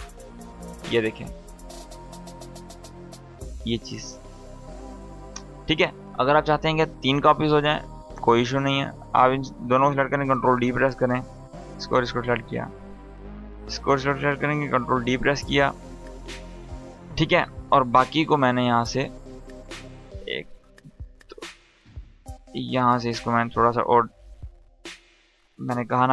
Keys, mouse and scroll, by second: 1.0-5.0 drag, 5.6 scroll down 1, 8.0 click, 9.8 ctrl+d, 10.8 click, 11.7 ctrl+click, 13.7 ctrl+click, 14.3 ctrl+d, 17.0 click, 20.0 ctrl+click, 24.7 ctrl+z, 25.5 click.